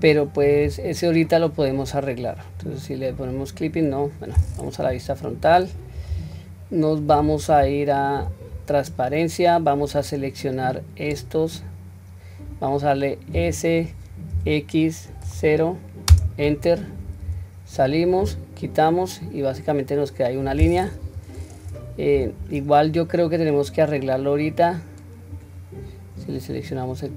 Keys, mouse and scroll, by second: 0.7 Tab, 1.3-2.2 middle drag, 3.2 click, 3.8 click, 4.9 KP_1, 5.4-5.9 scroll up 1, 6.1 scroll up 2, 6.4-6.9 shift+middle drag, 8.2 q, 9.9-11.7 drag, 17.3 Tab, 18.3 q, 19.3-19.8 scroll down 1, 19.8 middle click, 19.8-20.3 scroll down 1, 21.0 KP_1, 21.4 scroll up 1, 22.2 Tab, 22.2 scroll up 1, 23.7 click, 26.2 click.